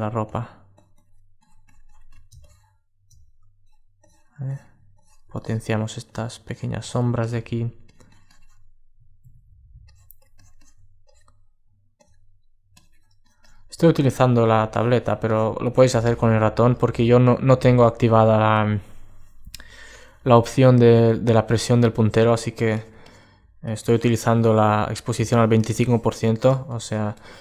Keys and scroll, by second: 27.3 alt+space.